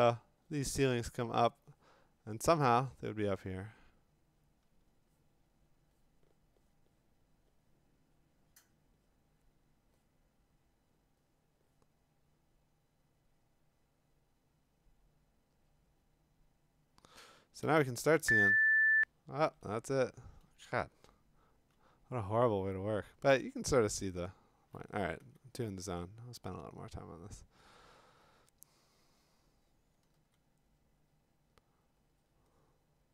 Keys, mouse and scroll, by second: 17.6 x, 21.0-21.7 ], 23.9-25.7 typing, 30.1 x.